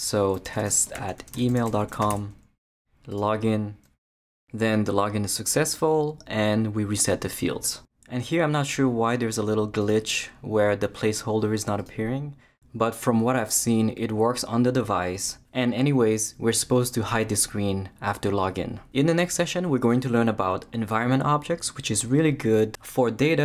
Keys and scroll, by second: 0.2-2.6 typing.